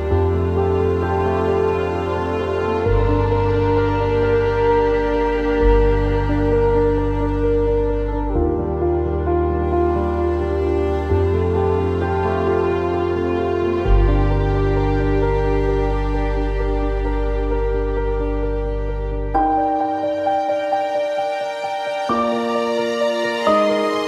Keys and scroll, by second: 1.4 Delete, 19.0-20.8 typing.